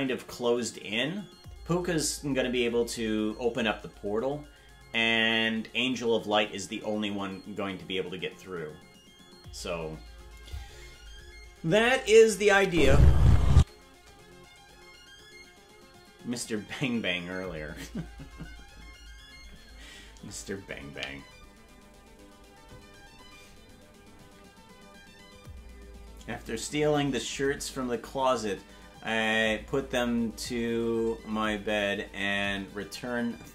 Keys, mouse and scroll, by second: 11.8 click, 12.6 space, 13.6 space.